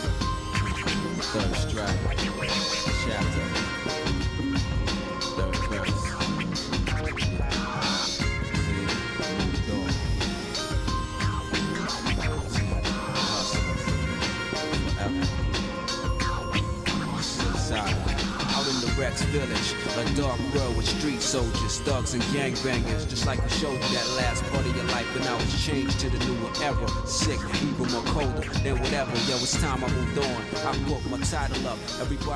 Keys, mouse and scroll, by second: 0.1 alt+shift+click, 1.2 f, 1.6 middle click, 1.6 f, 2.2 shift+middle click, 2.9 middle click, 3.8 shift+middle click, 4.6 click, 5.5 alt+shift+click, 6.2 click, 6.8 f, 7.1 middle click, 8.4 alt+shift+click, 9.0 scroll down 1, 9.0 middle click, 9.5 f, 9.9 middle click, 10.1 scroll down 1, 10.5 middle click, 11.1 shift+middle click, 12.1 ctrl+Tab, 13.2 click, 13.6 shift+click, 14.7 click, 15.1 click, 15.7 shift+click, 16.9 j, 17.6 click, 18.1 shift+click, 19.4 j, 19.7 middle click, 20.8 click, 21.5 shift+click, 22.8 j, 23.4 click, 24.0 shift+click, 24.0 j, 25.1 j, 25.3 middle click, 25.3 j, 26.1 shift+middle click, 27.0 scroll down 1, 27.6 shift+middle click, 28.4 middle click, 28.9 scroll up 2, 29.5 scroll down 1, 30.4 click, 31.8 shift+click.